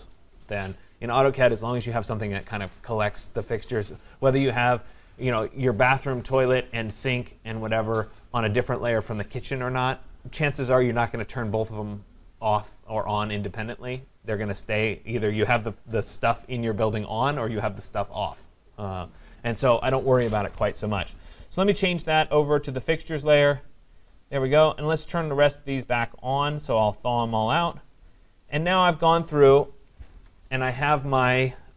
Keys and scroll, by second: 30.1 Escape.